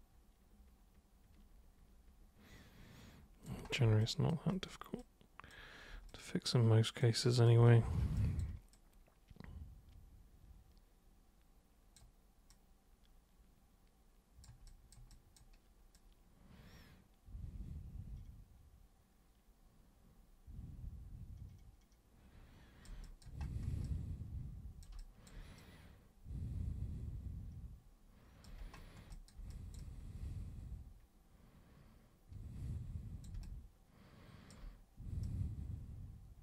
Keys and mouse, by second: 4.0 alt+super+click, 5.0 alt+super+click, 6.1 super+click, 7.2 super+click, 8.2 alt+super+click, 8.7-12.0 super+drag, 12.5-14.4 super+drag, 14.7 super+click, 15.1 super+click, 15.9-22.9 super+drag, 23.1 alt+super+click, 23.9-24.9 super+drag, 25.0 alt+super+click, 25.6-28.4 super+drag, 28.8 alt+super+click, 29.2 alt+super+click, 29.5 super+click, 33.4-34.5 alt+super+drag, 35.2-36.4 super+drag.